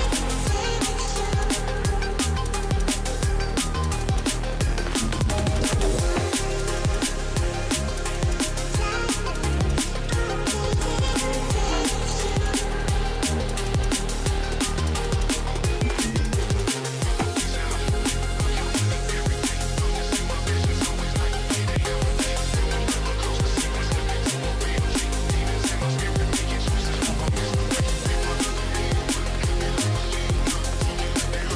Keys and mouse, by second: 2.6 click, 7.5 click, 8.0 click, 8.7 KP_3, 9.5 KP_3, 10.0 KP_3, 10.4 ctrl+alt+KP_0, 12.1-13.2 shift+middle drag, 13.6 click, 18.0 click, 18.2 click, 18.8-21.0 drag, 20.9 KP_0, 24.9 click, 25.7 click, 26.7-29.1 drag, 30.5 middle click.